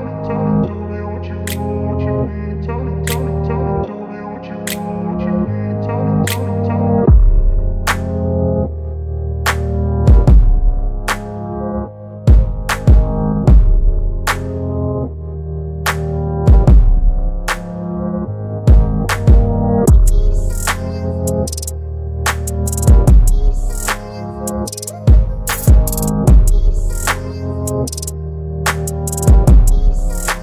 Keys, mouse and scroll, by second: 1.9 click, 1.9-3.5 drag, 4.8 ctrl+c, 6.1 click, 8.0 ctrl+v, 12.0 click, 13.4 v, 15.0-16.8 drag, 17.7 ctrl+t, 19.5-20.4 drag, 23.2 Return, 30.0 shift+click.